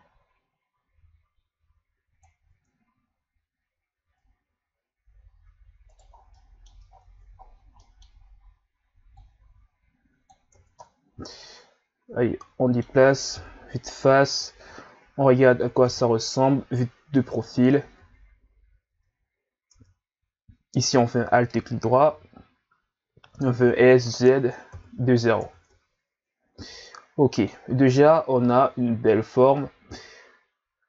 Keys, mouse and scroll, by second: 2.4 Tab, 4.0 Tab, 5.9 right click, 6.1 scroll down 3, 6.3 middle click, 6.9-7.8 scroll down 6, 7.8 middle click, 8.2-9.1 scroll up 1, 9.1 click, 10.6 Tab, 10.8-13.3 middle drag, 13.3 KP_1, 15.9 KP_3, 17.4-18.0 scroll up 2, 18.0 Tab, 18.9 Tab, 19.7 Tab, 20.8 alt+right click, 22.1 o, 23.6 s, 25.7 Tab, 26.4 scroll down 1, 26.7-28.3 middle drag, 28.3-29.4 scroll up 4, 29.4 scroll up 1, 29.6-30.8 middle drag.